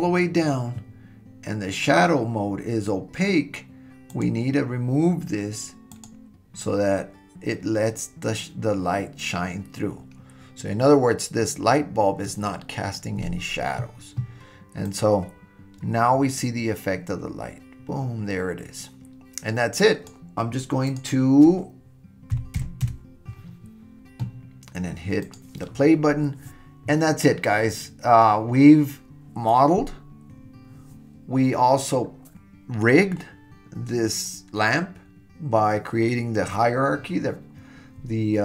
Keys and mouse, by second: 4.1 click, 14.9-20.1 drag, 20.9-23.4 drag, 25.3 click.